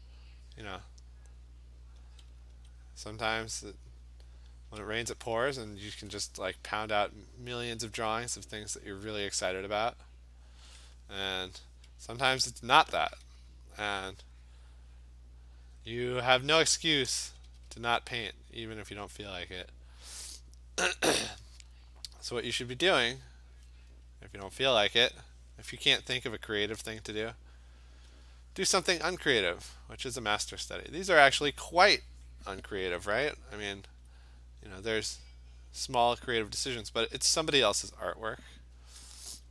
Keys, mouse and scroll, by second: 2.0 click, 2.5 alt+click, 4.5 click, 5.2 alt+click, 10.6 click, 11.2 click, 12.3 alt+click, 12.9 click, 14.0 alt+click, 14.5 click, 14.7 click, 15.0 click, 15.4 click, 15.6 alt+click, 16.9 click, 17.1 ], 17.3 ], 17.5 ], 17.7 ], 19.2 click, 20.6 click, 21.4 click, 22.5 alt+click, 22.7 alt+click, 24.6 alt+click, 27.4 click, 27.7 click, 27.8 alt+click, 28.8 click, 29.1 click, 29.9 click, 31.0 click, 31.2 click, 34.0 alt+click, 34.5 alt+click, 35.1 click, 36.1 click, 36.8 alt+click, 37.4 click, 38.3 click, 38.5 click, 39.0 alt+click, 39.4 alt+click.